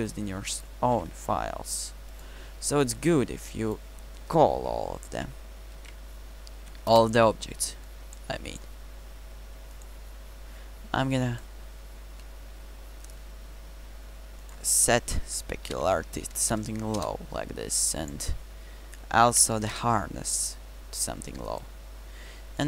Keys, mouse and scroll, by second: 1.0 n.